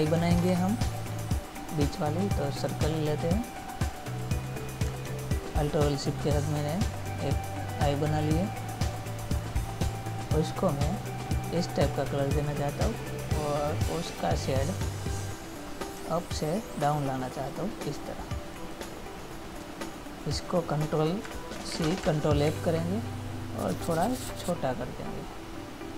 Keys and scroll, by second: 0.7 ctrl++, 22.0 ctrl+c, 22.8 ctrl+f.